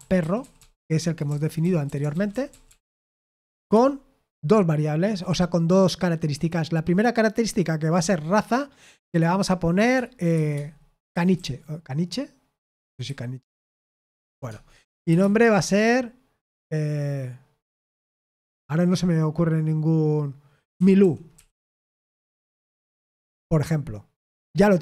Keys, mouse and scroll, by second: 0.0-3.4 typing, 10.8-15.0 typing, 20.4-22.0 typing.